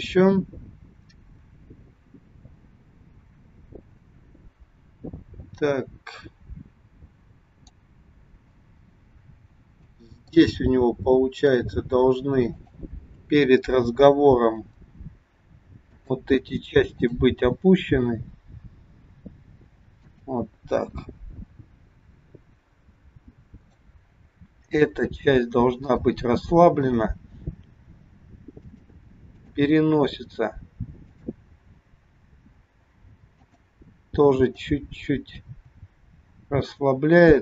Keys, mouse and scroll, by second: 8.7-9.7 scroll up 4, 9.8 shift+middle click, 11.5 click, 12.5 click, 14.5 g, 16.8 click, 18.1 g, 23.5 click, 24.8 g, 26.7 click, 28.0 g, 29.5 click, 31.0 click, 32.2 g, 34.3 click, 35.5 g.